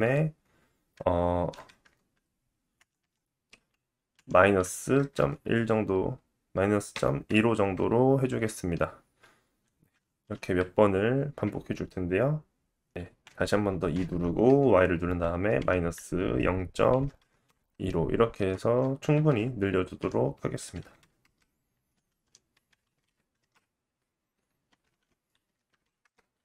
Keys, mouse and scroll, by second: 9.9-13.2 middle drag, 9.9 e, 13.2 e, 19.1 e, 21.7 e.